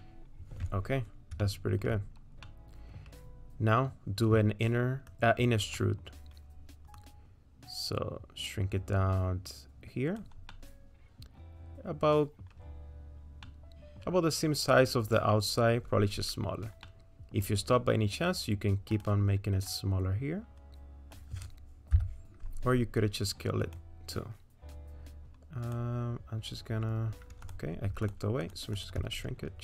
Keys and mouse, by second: 1.4 shift+middle click, 2.4 middle click, 5.1 click, 5.8 middle click, 6.9-10.2 drag, 10.5 click, 11.1-12.4 middle drag, 13.5 middle click, 16.8 middle click, 19.0-23.7 drag, 20.8-23.7 middle drag, 27.5 click, 28.0 shift+click, 28.7 shift+click.